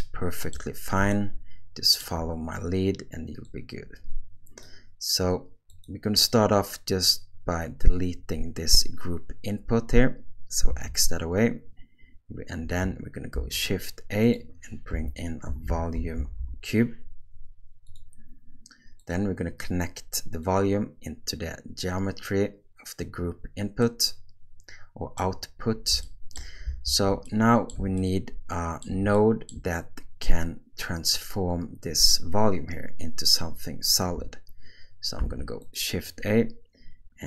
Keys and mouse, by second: 1.1 ctrl+middle click, 3.5-4.6 drag, 5.7 click, 10.7 x, 13.3 shift+a, 20.4-23.0 drag, 23.8-25.2 middle drag, 26.0 shift+middle click, 26.8 alt+a, 27.3-27.7 middle drag, 28.0-28.8 ctrl+middle drag, 29.1 shift+middle click, 35.2 shift+a.